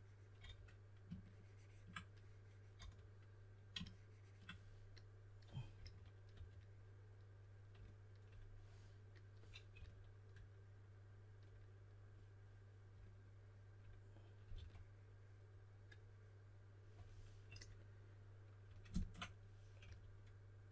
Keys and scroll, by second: 0.1-0.9 typing, 2.8 d, 5.7-6.8 typing, 9.7 s, 14.5 5, 19.8-20.7 typing.